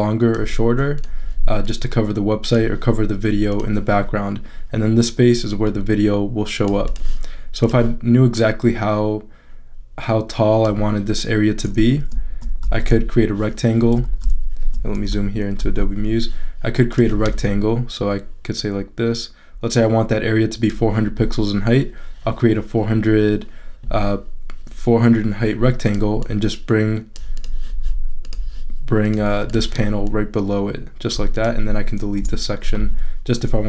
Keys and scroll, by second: 12.6 shift+super+z, 14.0 shift+super+z, 15.0 shift+super+=, 32.2 BackSpace.